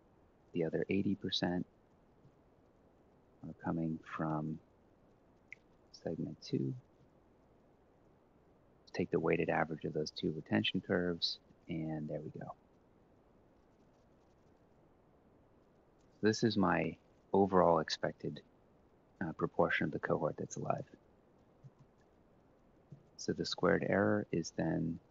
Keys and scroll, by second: 0.0-0.4 typing, 1.9 F4, 2.3-4.0 typing, 6.2 Return, 6.6 Up, 6.8 ctrl+c, 6.9 F4, 6.9 Return, 6.9 shift+Down, 7.5 shift+Down, 8.7 shift+Down, 9.0 ctrl+v, 10.4 shift+Down, 19.8-24.4 typing.